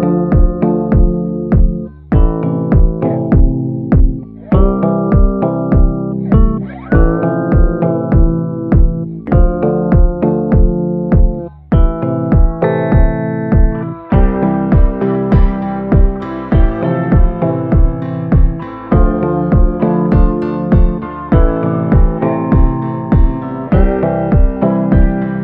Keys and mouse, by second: 0.1 click, 0.6 [, 1.0 [, 1.1 click, 1.6 ctrl+z, 1.8 click, 1.8 [, 2.2 ctrl+z, 2.3 [, 2.6-3.8 drag, 4.7-6.5 middle drag, 6.9 middle click, 8.6 ], 8.9 ], 9.0 ], 9.1 click, 9.8 click, 10.5 ctrl+z, 10.8 ctrl+z, 11.0 [, 11.1 click, 11.6 ctrl+z, 12.2 ctrl+z, 12.3 click, 12.3 [, 12.6 click, 12.9 click, 13.3 click, 13.8 click, 14.5 click, 14.9 ctrl+z, 15.4 ctrl+z, 15.5 ctrl+z, 15.8 click, 16.8 click, 17.5 ctrl+z, 17.8 click, 19.0 click, 20.3 click, 20.8 click, 21.3 click, 21.5 click, 21.8 click, 22.1 click, 22.4 click, 23.8 ctrl+z, 24.2 click, 24.8 ctrl+z, 25.0 click.